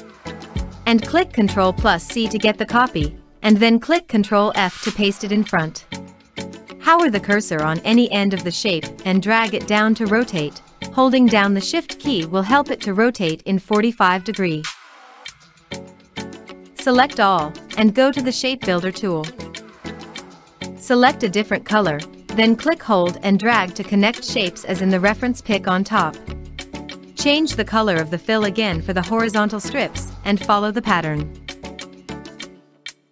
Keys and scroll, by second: 1.4 ctrl+c, 2.7 ctrl+f.